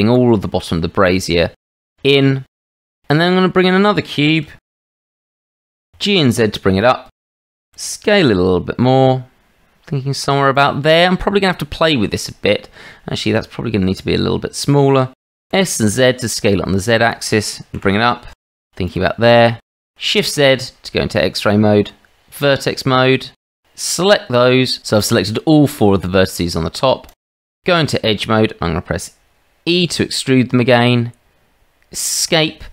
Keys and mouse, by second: 2.0 shift+z, 2.6 shift+middle click, 2.8 middle click, 3.8 shift+middle drag, 4.7 shift+a, 5.7 g, 7.7 s, 13.4 s, 15.4 s, 17.7 g, 19.5 shift+z, 21.1 Tab, 23.6 click, 24.5 click, 27.1 click, 27.9 shift+middle click, 29.7 e.